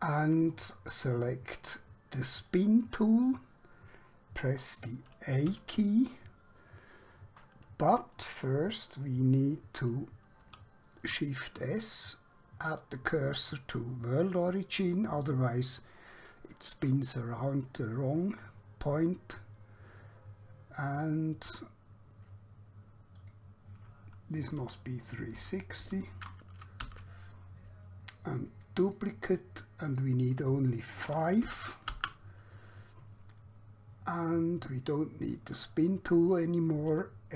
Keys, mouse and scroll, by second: 2.4 click, 5.6 a, 10.6 shift+s, 13.1 click, 21.2 click, 24.6-25.8 typing, 27.0 Return, 28.9 click, 31.4 5, 32.0 Return, 35.6 click.